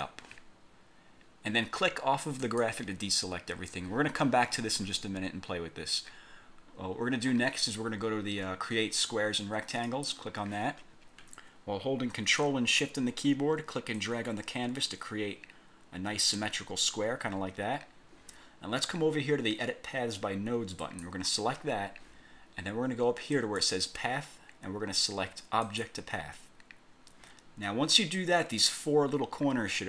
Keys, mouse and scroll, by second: 2.5 click, 6.3-6.7 scroll down 2, 7.1 scroll down 1, 9.9 click, 14.1-16.6 ctrl+shift+drag, 17.0 scroll down 2, 20.9 click, 23.5 click, 25.8 click.